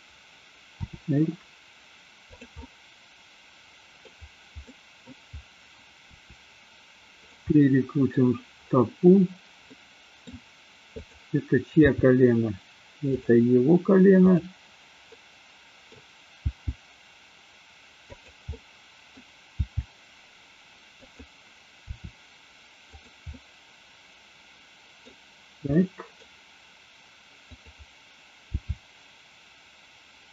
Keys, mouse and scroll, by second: 0.9 r, 2.2 click, 2.5-4.1 middle drag, 4.6 middle click, 6.1 r, 7.2 click, 7.5-8.0 middle drag, 9.7 middle click, 11.0 click, 11.7 g, 13.1 click, 14.2 click, 15.1 middle click, 16.4 g, 18.0 click, 18.5 middle click, 19.6 g, 21.0 click, 21.9 r, 23.0 drag, 23.2-25.1 middle drag, 25.6-26.2 middle drag, 28.5 g.